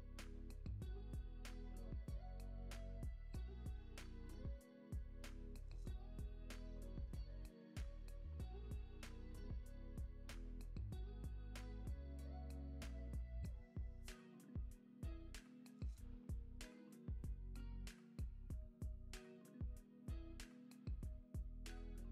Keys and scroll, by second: 3.9 alt+q, 4.3 super+s, 9.5 super+Down, 10.3 super+Down, 10.8 super+Down, 12.5 super+Down, 13.5 super+Down, 14.6 space.